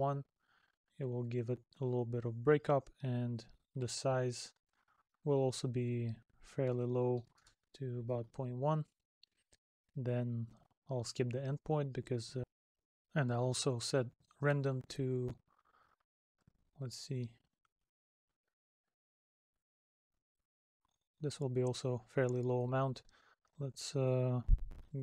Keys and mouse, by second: 1.2 middle click, 9.0 middle click.